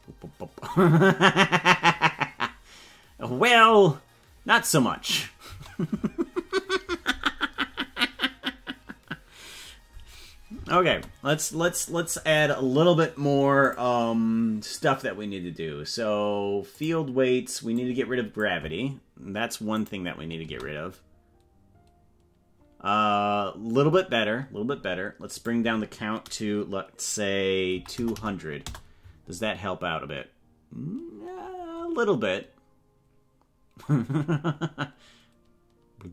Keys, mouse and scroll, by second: 5.5 space, 10.5 space, 11.0 space, 13.6 click, 16.9 click, 17.9 click, 19.9 click, 20.4 space, 25.3-31.1 drag, 28.1 KP_0.